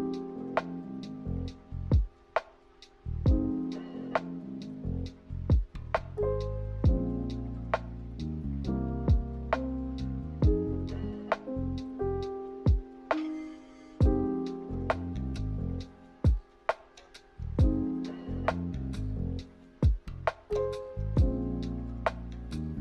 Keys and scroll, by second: 3.9-5.8 typing.